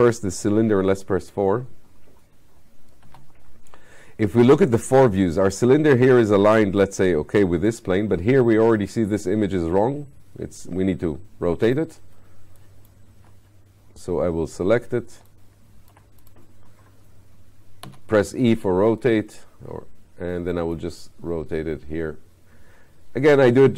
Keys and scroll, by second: 3.0 space.